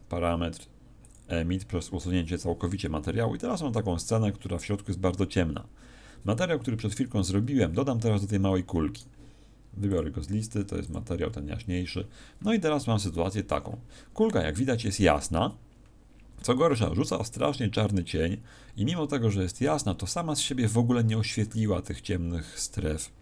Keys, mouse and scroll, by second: 1.0 click, 8.4 Escape, 8.9 right click, 9.9 click.